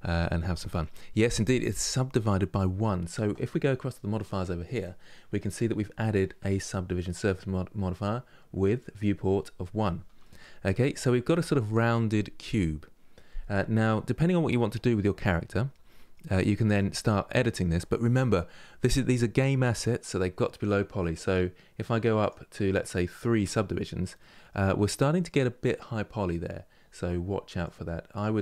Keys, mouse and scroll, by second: 4.4 click, 9.9-12.9 middle drag, 13.9-16.3 middle drag, 16.3 Tab, 16.7-21.9 middle drag, 21.9-23.3 drag, 23.3 scroll up 2, 23.9-26.9 middle drag, 27.3 click, 27.8 click, 28.1-28.4 drag.